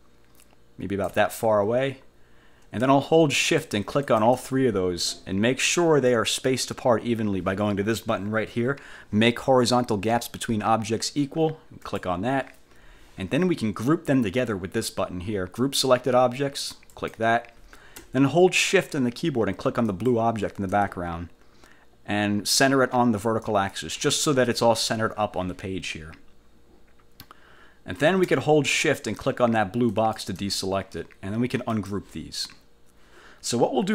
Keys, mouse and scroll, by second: 3.6 shift+click, 4.2 shift+click, 12.0 click, 17.0 click, 20.0 shift+click, 23.6 click, 30.0 shift+click, 31.8 click.